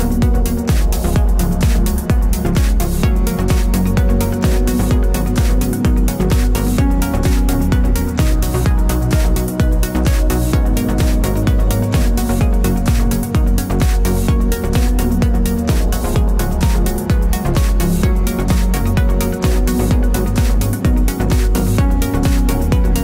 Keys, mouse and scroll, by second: 1.0 click, 1.1 click, 2.9 a, 3.8-5.6 right drag, 5.6 shift+click, 5.8 shift+click, 6.7 click, 7.1 drag, 8.3 click, 9.4-12.7 middle drag, 9.9 g, 11.7 g, 13.0 click, 13.3 click, 13.5-23.0 middle drag, 13.8 scroll down 1, 14.1 scroll up 1, 15.3 z, 17.3 KP_0.